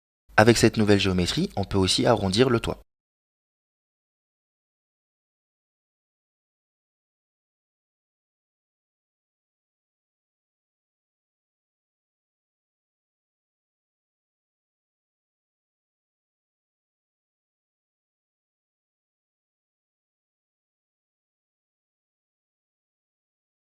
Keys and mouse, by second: 2.1 click, 4.0 right click, 4.9 KP_Decimal, 8.5 ctrl+KP_Add, 10.5 g, 13.7 right click, 14.8 g, 18.5-23.0 middle drag.